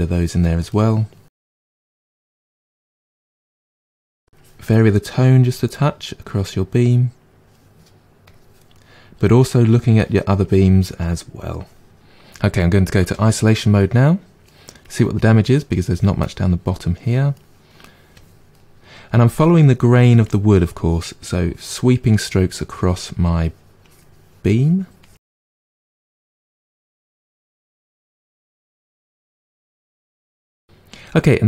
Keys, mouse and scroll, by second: 0.3 click, 0.6 middle click, 1.4 click, 1.6 middle click, 2.3-4.7 drag, 4.7 middle click, 5.4 click, 5.7-8.2 middle drag, 8.2 click, 8.7-10.4 middle drag, 10.4-11.9 drag, 11.9-13.0 middle drag, 13.0 KP_Divide, 13.5-14.8 middle drag, 14.8-16.2 drag, 16.2 middle click, 16.9 click, 17.3 middle click, 18.1 click, 18.5-19.9 middle drag, 19.9 click, 20.7 middle click, 21.4-22.5 drag, 22.5-23.8 middle drag, 23.8-25.7 drag, 25.9 click, 26.5 middle click, 26.9 click, 27.7 middle click, 28.1 click, 29.1-30.3 drag, 30.3-31.4 middle drag.